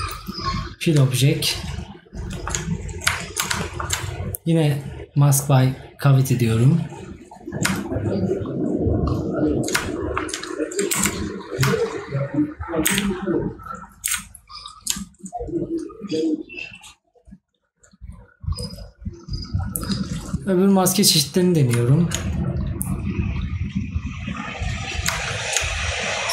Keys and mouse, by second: 2.3 right click, 10.0 right click.